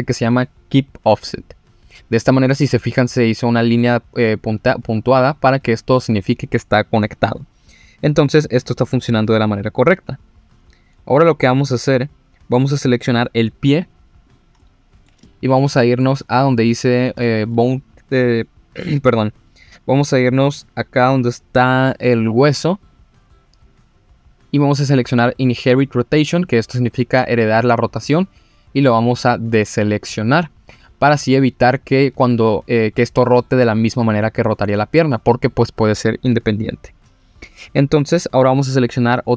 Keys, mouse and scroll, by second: 11.1-13.1 scroll down 2, 14.2 click, 14.6 middle click, 15.2 shift+middle click, 15.8 middle click, 16.2-17.1 scroll up 2, 17.2 shift+middle click, 22.8 click, 28.0 click, 28.7-29.8 scroll up 3, 31.1-31.9 scroll down 1.